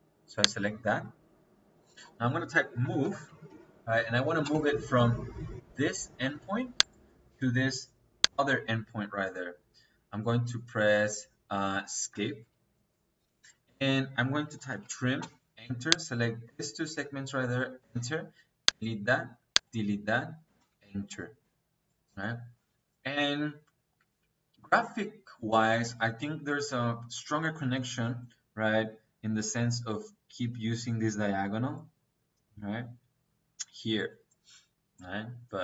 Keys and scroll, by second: 2.7-4.3 typing, 12.0 Escape, 13.5 Escape, 14.3-15.1 typing, 17.7 space, 20.3 -.